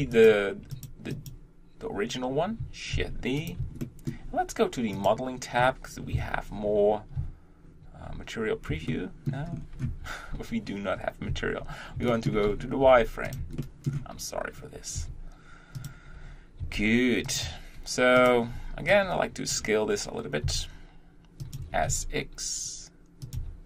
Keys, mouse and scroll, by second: 0.1 click, 0.7 click, 1.1 click, 2.9 shift+d, 3.8-4.9 shift+middle drag, 4.9-6.1 drag, 6.1 KP_1, 8.2 z, 8.9 shift+middle click, 9.5 scroll up 3, 9.9 Tab, 11.6 z, 12.1 shift+middle click, 12.5-12.8 scroll up 3, 12.8 g, 13.6-15.8 shift+middle drag, 15.8 r, 16.6 g, 17.5 Tab, 18.3 click, 19.5 b, 21.4 s, 21.7 s.